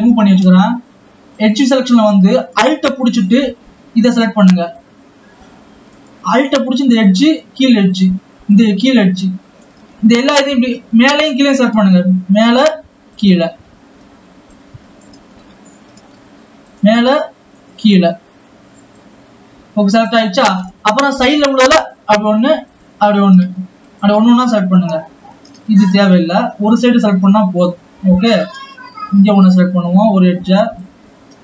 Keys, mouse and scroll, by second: 0.1-1.5 scroll up 2, 1.5 click, 2.0 alt+a, 3.3 alt+click, 7.2 alt+shift+click, 8.2 alt+shift+click, 11.1-12.7 drag, 13.6 alt+shift+click, 14.6-15.7 drag, 15.7-16.2 scroll down 1, 16.2 scroll down 1, 16.9 alt+shift+click, 17.7 alt+shift+click, 19.2-20.5 drag, 20.5-22.0 scroll up 1, 22.0 alt+shift+click, 22.8 alt+shift+click, 26.3 alt+shift+click, 27.8-29.5 drag, 29.8 scroll down 3, 30.9-31.4 drag.